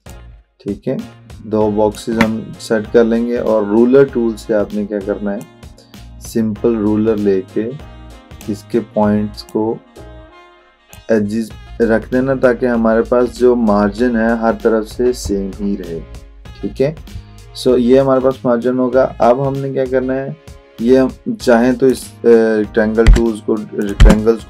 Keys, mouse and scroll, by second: 0.5-2.1 alt+drag, 5.4 click, 5.5-8.6 drag, 21.9 click.